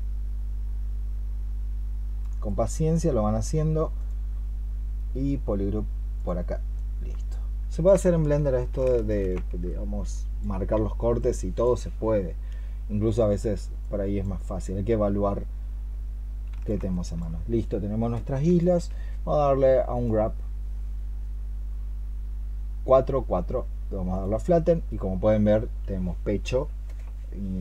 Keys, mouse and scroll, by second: 8.8 ctrl+shift+click, 16.8 alt+click.